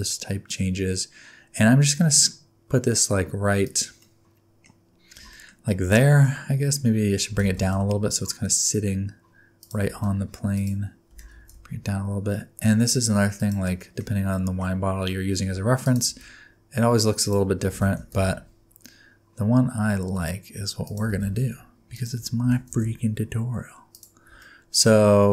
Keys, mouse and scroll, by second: 4.0 middle click, 4.7-5.2 scroll up 3, 5.3 shift+middle click, 5.7 shift+middle click, 6.0 middle click, 6.3 scroll up 1, 7.3 g, 9.9 s, 11.1 g, 13.8 shift+middle click, 15.3 e, 16.1 s, 17.7 g, 21.3 shift+s, 22.4 g, 24.4 middle click.